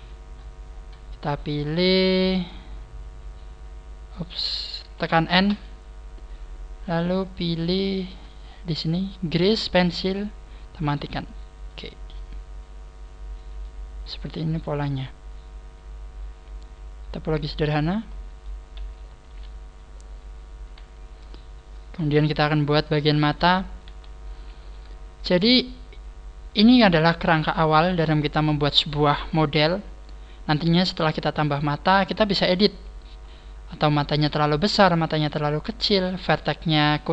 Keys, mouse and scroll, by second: 0.0-1.1 scroll down 20, 1.8 scroll up 1, 2.0 scroll down 1, 2.4 scroll up 1, 3.4 scroll up 6, 5.4 n, 6.4-9.7 scroll up 19, 11.0 click, 11.6 n, 12.0 middle click, 14.0 middle click, 19.2 KP_3, 22.4 shift+middle click, 23.2 scroll up 4, 23.8 a, 25.4 scroll down 3.